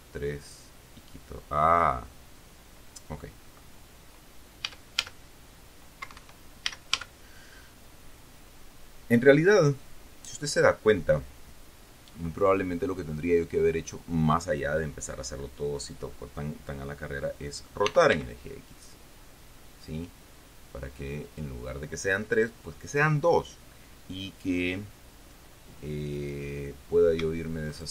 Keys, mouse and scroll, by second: 5.0 a, 6.4 Escape, 7.0 a, 18.2 r, 18.5 x, 21.6 click.